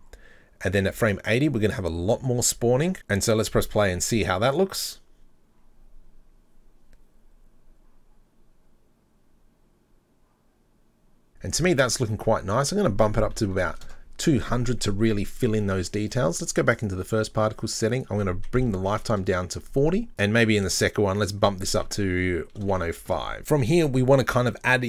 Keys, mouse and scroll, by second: 4.5 click, 12.6-14.7 drag, 13.7 KP_0, 16.8 click, 18.0-20.1 drag, 20.2 click, 21.2-23.4 drag.